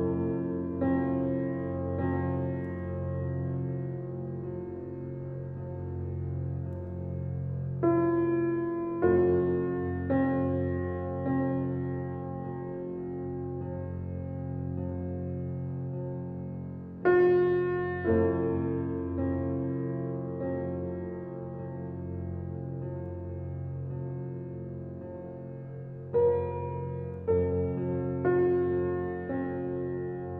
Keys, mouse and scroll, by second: 1.7 click, 4.9-6.7 scroll up 1, 10.1-11.8 right drag, 11.8 click, 12.2 alt+click, 14.4 right click, 15.6 click, 19.1 click, 21.7-24.2 right drag, 24.2 alt+click, 26.9 click, 30.2 alt+click.